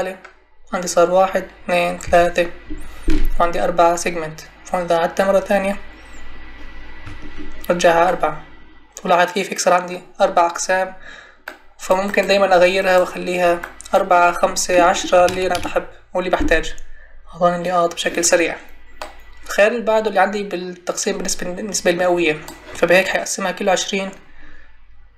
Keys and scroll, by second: 15.2 1, 15.5 Return.